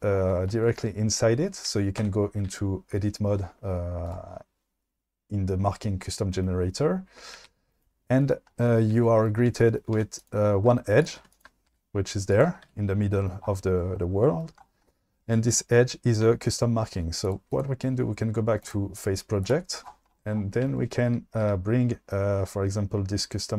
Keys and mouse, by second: 2.1 Tab, 4.1 click, 7.5 a, 10.0 1, 11.2 2, 11.3 click, 11.8 g, 12.4 click, 12.7 ctrl+z, 17.6-19.4 drag.